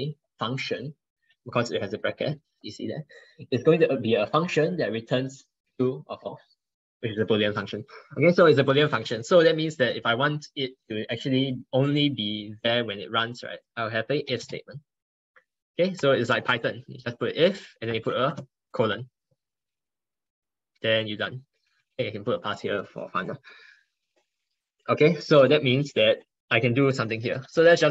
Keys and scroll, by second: 9.1 ctrl+Left, 9.3 ctrl+Left, 16.2 ctrl+Right, 16.4 ctrl+Right, 16.5 ctrl+Right, 16.9 ctrl+Right, 17.8 ctrl+Right, 25.8 ctrl+BackSpace.